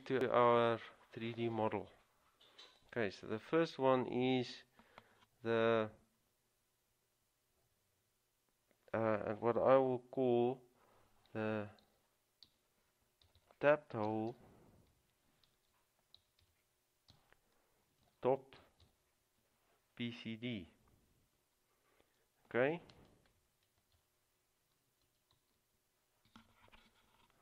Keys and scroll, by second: 12.0-12.6 typing, 14.4 typing, 15.7-19.5 typing, 25.2-26.0 typing.